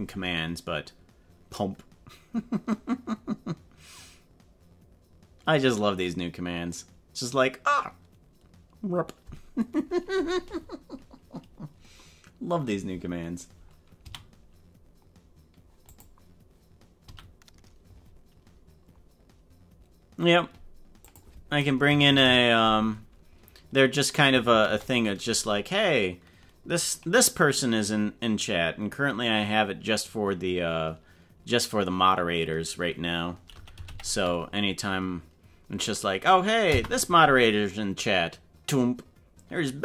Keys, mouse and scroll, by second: 17.1 a.